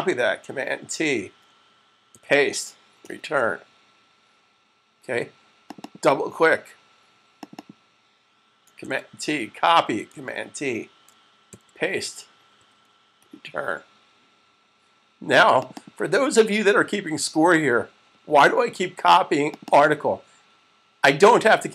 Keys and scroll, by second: 0.1 t, 1.9 super+v, 8.5 super+c, 10.4 t, 12.0 super+c, 12.8 v.